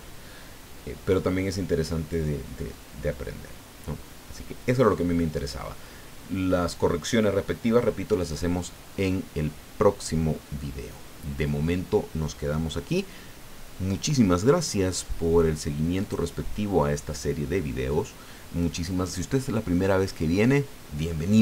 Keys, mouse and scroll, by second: 2.7-5.5 drag, 16.0 click.